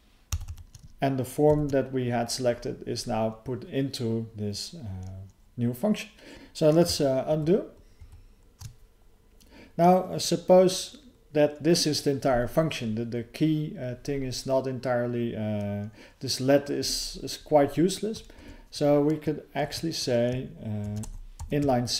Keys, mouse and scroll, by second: 6.3 alt+f, 6.3 ctrl+_, 7.3 ctrl+_, 8.0 ctrl+_, 18.3 alt+f.